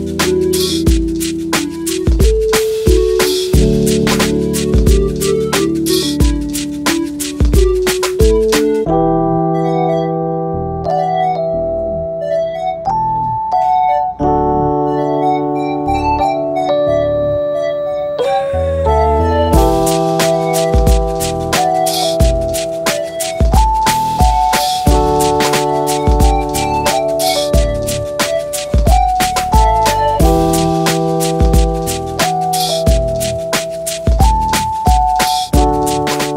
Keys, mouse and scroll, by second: 0.6-1.7 middle drag, 2.3 ctrl+g, 3.3 shift+g, 5.2 alt+click, 19.3 middle click, 24.0 middle click, 27.2 ctrl+Tab, 27.7 click, 28.6 ctrl+Tab, 29.0-29.8 drag, 31.6 alt+click, 32.4-34.2 middle drag, 34.2-35.7 drag.